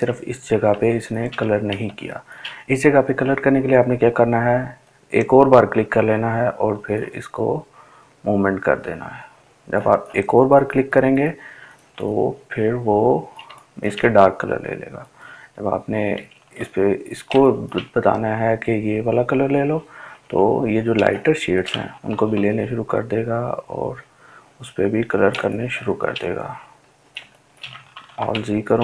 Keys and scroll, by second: 18.2 ctrl+z, 27.8 ctrl+alt+z, 28.2 ctrl+alt+z.